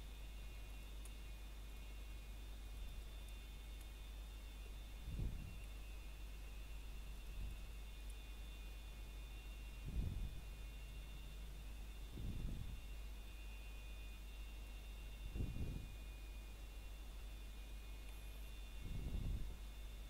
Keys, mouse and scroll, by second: 0.4 click, 1.9 s, 3.8 click, 4.2 shift+middle click, 4.5 scroll up 1, 5.5 click, 6.2 shift+click, 13.2-14.1 scroll down 3, 13.7 shift+middle click, 15.9-16.4 scroll up 2, 15.9 shift+middle click, 16.7 shift+middle click, 17.1 scroll up 1, 18.3 shift+middle click, 18.7 scroll up 1, 19.2 shift+middle click, 19.6 scroll down 1.